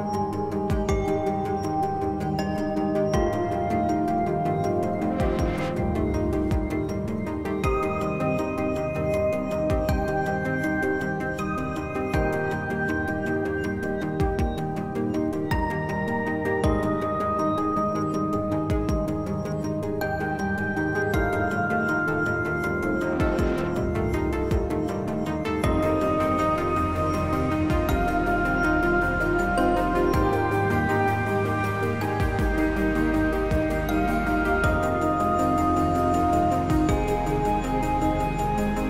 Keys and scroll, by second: 19.8 s, 28.2 s, 30.9 b, 34.9 z, 35.5 s, 37.4 ctrl+z, 37.6 ctrl+z.